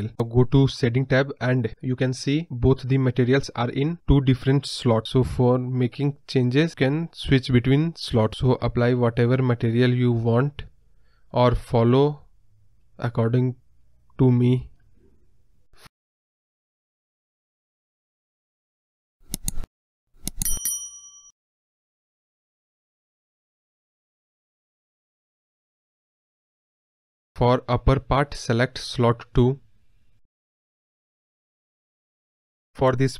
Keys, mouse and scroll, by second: 0.0-0.7 scroll down 4, 0.7-1.7 scroll up 3, 1.7-2.0 scroll up 1, 2.0-4.4 middle drag, 4.4-6.3 drag, 6.3-7.5 middle drag, 6.4 scroll up 1, 7.5-9.9 drag, 10.5 scroll down 2, 10.7-11.1 middle drag, 11.1 KP_Decimal, 11.4-11.7 scroll up 3, 12.3-13.3 drag, 13.3 scroll down 1, 13.4 scroll up 2, 13.4 middle click, 13.5 scroll down 1, 13.8 scroll up 2, 13.8 middle click, 14.3 scroll down 1, 14.4-14.9 scroll up 1, 14.9-22.7 drag, 24.5 click, 25.0 scroll down 2, 25.1-26.1 scroll up 5, 25.1 middle click, 26.1-27.4 scroll down 5, 27.4 middle click, 28.3-30.5 drag, 30.5 scroll down 1, 30.6 middle click, 30.8-31.2 scroll up 1, 31.2-32.3 drag, 32.3-32.7 scroll down 2, 32.4 middle drag, 32.7-33.1 scroll up 1.